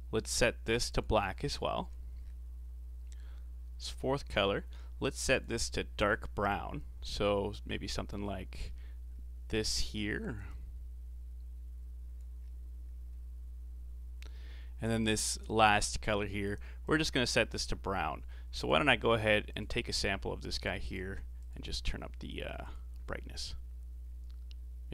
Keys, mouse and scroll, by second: 0.3 click, 4.3-5.4 drag, 15.0-16.9 drag, 18.6 click, 21.4 click, 22.6 click.